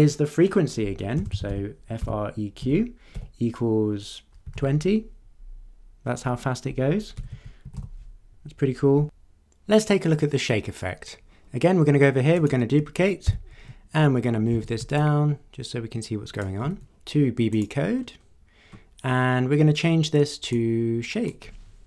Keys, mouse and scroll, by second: 1.0-2.0 typing, 3.1 =, 4.2-5.0 typing, 7.2-8.2 typing, 12.4 click, 13.2 ctrl+d, 14.5 w, 14.9-16.6 ctrl+drag, 17.5 click, 17.9-18.3 scroll down 2, 18.6 scroll down 2, 20.5-21.5 drag.